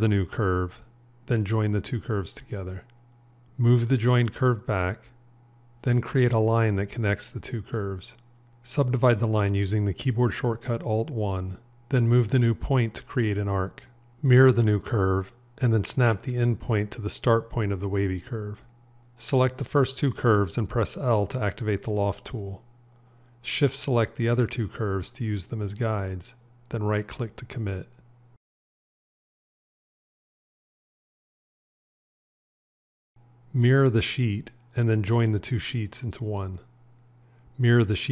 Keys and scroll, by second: 2.6 j, 3.9 g, 9.5 alt+1, 15.1 alt+x, 22.5 l, 33.5 alt+x, 36.4 j, 38.0 alt+x.